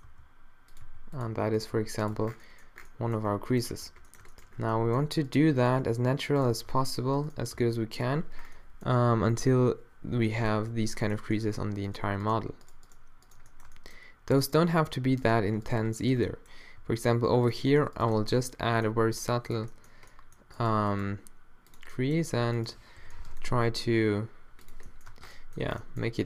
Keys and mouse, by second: 0.7 r, 0.8 g, 1.8 g, 2.2 Tab, 3.3 a, 3.8 Tab, 5.9 d, 6.6 r, 7.5 d, 16.3 middle click, 16.8 g, 19.0 g, 21.0 g, 22.3 a, 23.0 o, 23.5 g, 25.1 Tab, 25.1 a, 25.1 o.